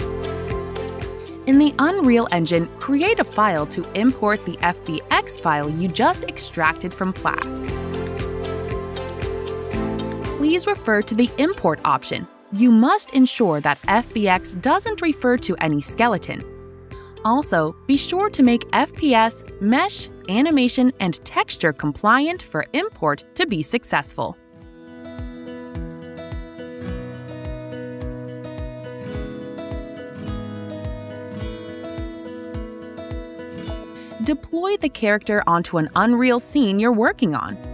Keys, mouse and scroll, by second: 1.3 click, 2.9 click, 5.6 typing, 7.7 Return, 7.7 right click, 9.4 click, 10.3 click, 17.6 click, 22.9 click, 26.3 click, 27.4 click, 29.3 click, 35.8 click, 35.9 click, 37.6 click.